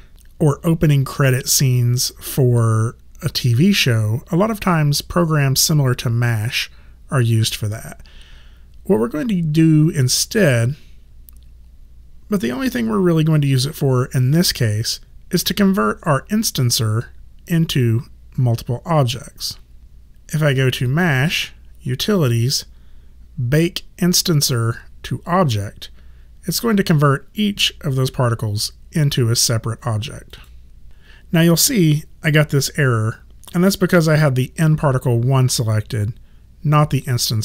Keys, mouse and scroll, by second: 11.8 click, 19.8 click, 30.3 click.